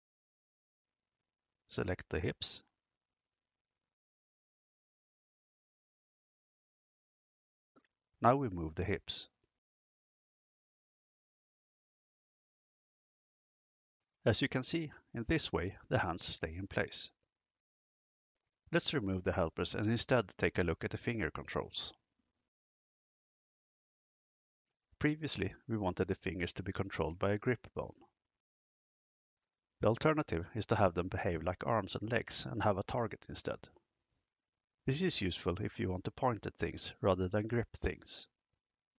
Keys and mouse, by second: 1.5 KP_3, 2.4-2.9 shift+middle drag, 6.5 KP_0, 7.4 g, 8.3 z, 16.0 Escape, 20.8 click, 25.5-35.0 drag, 37.6 click.